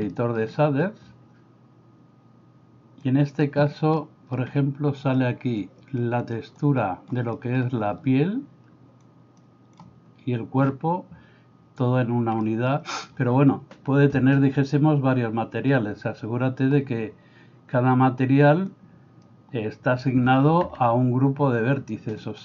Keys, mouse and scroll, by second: 0.2 middle click, 3.1 click, 4.0 middle click, 5.6 click, 6.7 click, 7.3 middle click, 9.1 click, 12.5 middle click, 18.8 click, 21.8 click.